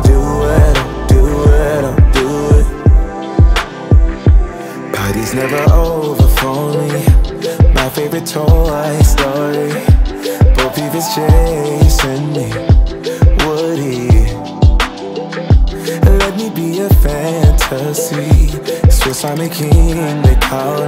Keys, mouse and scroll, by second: 0.6 F9, 1.6 click, 2.5 space, 7.6 click, 8.2 space, 10.3 click, 11.3 shift+Page_Down, 12.8-15.9 drag, 15.9 click, 16.4 space.